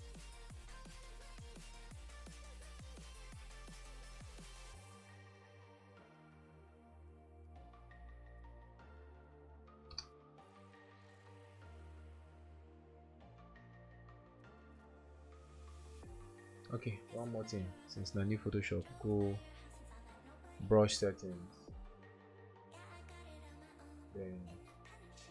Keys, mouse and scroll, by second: 1.2 typing, 4.1-4.8 typing, 7.0-7.9 typing, 13.6 typing.